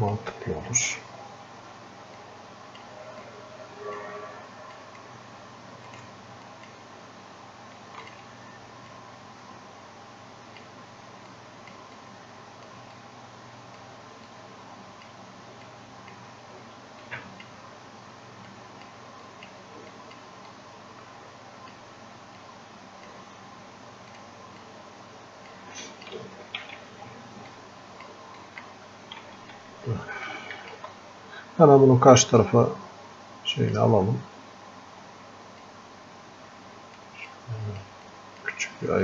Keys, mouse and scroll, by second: 3.3-13.1 drag, 13.1-18.5 drag, 18.5-34.9 drag, 22.5 typing, 25.0 typing, 34.9 scroll down 1, 36.0-39.0 drag.